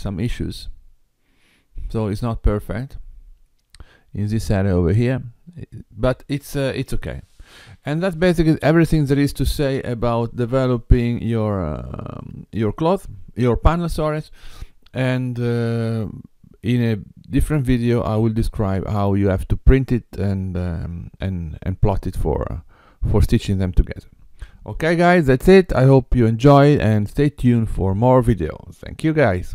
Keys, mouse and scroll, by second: 3.0-3.3 scroll up 2, 3.9 scroll down 1, 6.7-7.1 scroll down 1.